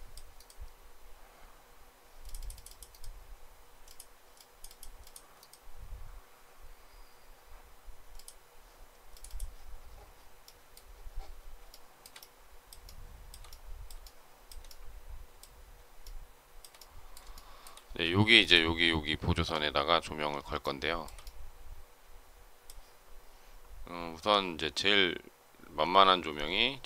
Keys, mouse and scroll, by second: 11.6 shift+middle click, 12.7 shift+middle click, 13.9 shift+middle click, 15.9 shift+middle click, 17.2 shift+middle click, 20.5 shift+middle click.